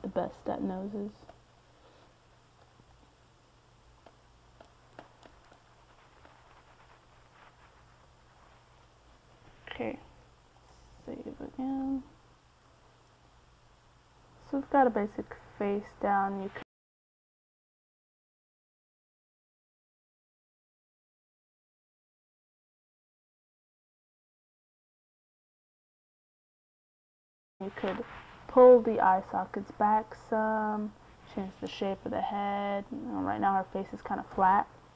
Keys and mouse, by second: 1.9-4.7 drag, 4.7 middle click, 6.0-7.0 middle drag, 7.0-10.4 drag, 10.7 middle click, 12.1-17.0 drag, 17.0-19.0 middle drag, 19.0 ctrl+s, 22.0-24.1 middle drag, 31.3-33.0 middle drag, 33.9 KP_3.